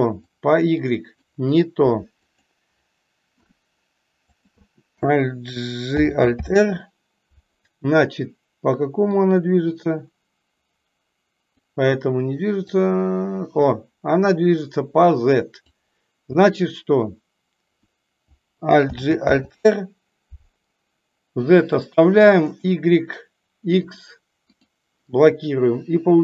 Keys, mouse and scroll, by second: 0.2 click, 2.2 click, 4.4 click, 9.1-11.4 drag, 12.6-15.6 drag, 23.9 click.